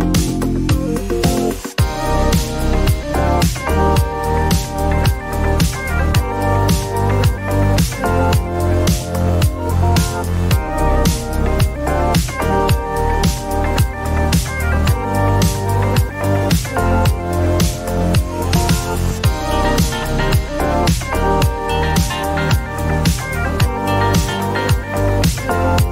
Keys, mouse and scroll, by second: 0.4 click, 2.7 click, 5.6 click, 6.4-7.0 typing, 8.8 click, 10.0 click, 10.2 click, 12.6 click, 14.5 click, 18.5 click, 19.4 typing, 20.4 Return, 22.1 click, 22.1-23.4 typing, 24.2 Return, 24.9 typing.